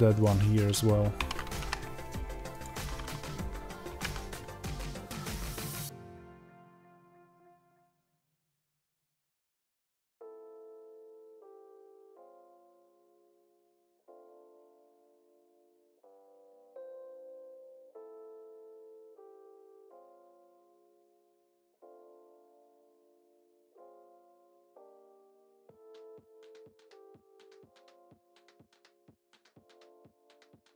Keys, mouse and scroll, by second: 1.1 alt+d, 4.5 click, 6.2 middle click, 6.5 g, 7.2 click, 7.3-8.5 middle drag, 7.9 g, 8.5 click, 8.6-10.2 middle drag, 9.2 alt+g, 10.2 click, 10.3-12.1 middle drag, 12.1 click, 12.3-13.8 shift+middle drag, 12.6 scroll up 1, 13.8 click, 14.9-16.4 middle drag, 16.1 scroll down 1, 16.4 click, 16.8 KP_0, 18.1 click, 18.4 alt+d, 22.8 space, 25.1 right click, 25.8 click, 29.6-30.7 middle drag, 30.5 g.